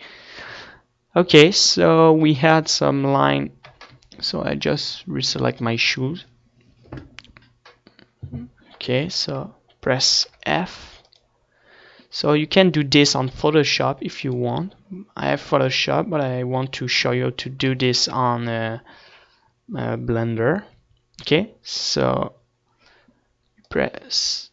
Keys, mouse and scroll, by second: 10.9 f, 14.2 f, 14.9-24.5 drag.